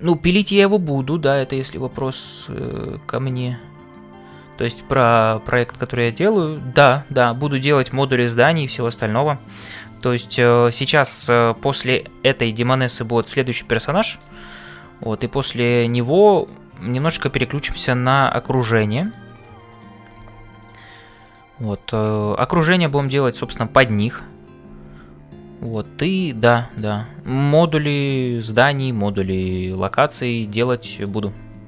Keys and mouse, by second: 0.0-31.6 typing, 13.9 shift+middle click, 15.0 middle click, 16.3 click, 16.9 middle click, 19.7 click, 21.2 click, 21.8 middle click, 26.7 middle click, 28.5 click, 30.2 middle click.